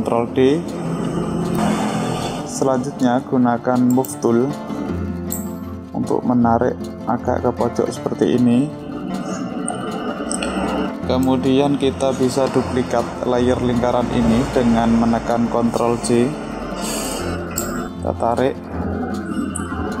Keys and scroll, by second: 15.3 ctrl+j.